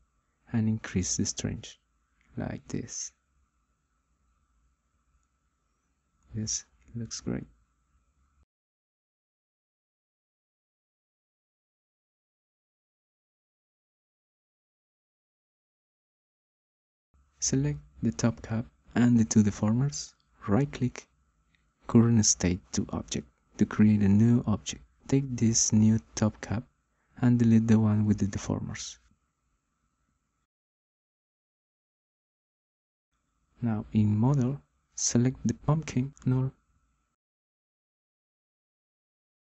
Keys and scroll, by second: 31.0 Delete.